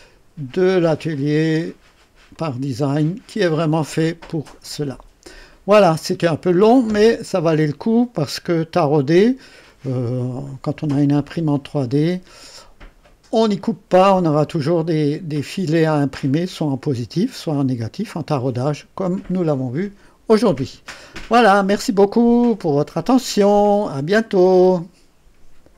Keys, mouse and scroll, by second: 1.0 click, 2.3 click, 14.0-14.3 scroll up 1, 14.9 right click, 21.8 right click, 24.4 right click, 25.7 click.